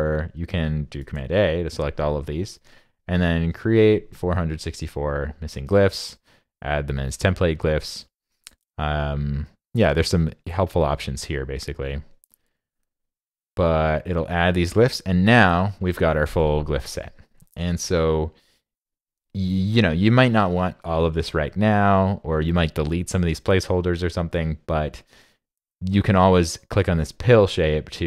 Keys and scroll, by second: 1.0 super+a.